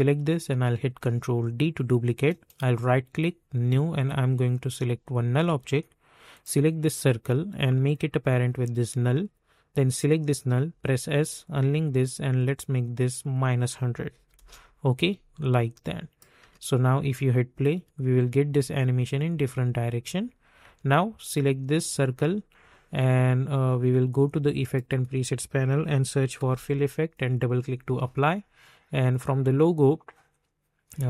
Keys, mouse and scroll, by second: 0.8 ctrl+d, 2.2 right click, 3.5-9.9 drag, 10.7 s, 11.4 click, 14.1 -, 14.3 Return, 15.5 click, 16.4 space, 18.4 space, 19.2 click, 19.9 space, 21.2 click, 24.6 click, 25.0 ctrl+a, 25.7-27.0 typing, 27.1 click.